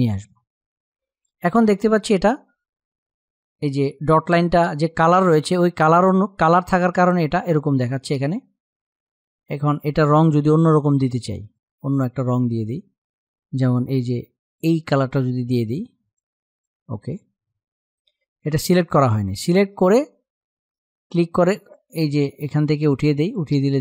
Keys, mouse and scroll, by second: 9.5-16.2 drag, 21.3 click.